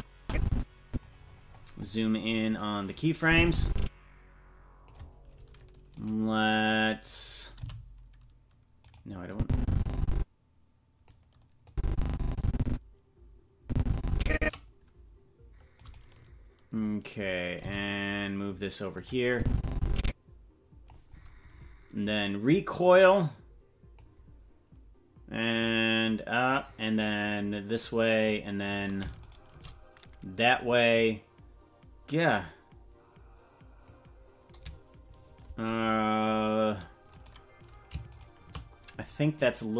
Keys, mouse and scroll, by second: 1.2-2.6 scroll up 1, 2.6-3.2 scroll up 21, 3.2-4.9 drag, 6.0 right click, 7.6 g, 9.3-11.1 drag, 11.7-14.6 drag, 15.8 right click, 17.6 g, 19.3-20.9 drag, 22.8-24.0 drag, 25.5-26.7 drag, 27.2-28.2 drag, 28.7 right click, 30.7-33.9 drag, 37.1-38.2 right drag.